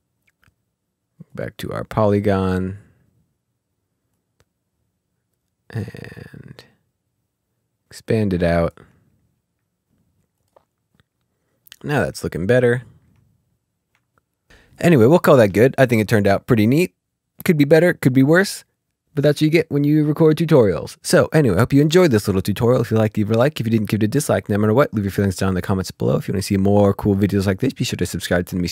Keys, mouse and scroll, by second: 0.4 click, 1.8 click, 2.4 ctrl+z, 3.1 click, 5.6 click, 10.8 click, 12.1 click, 12.4 scroll down 2, 12.6 ctrl+scroll, 12.7-13.0 ctrl+scroll up 1, 22.5-27.7 ctrl+scroll up 1.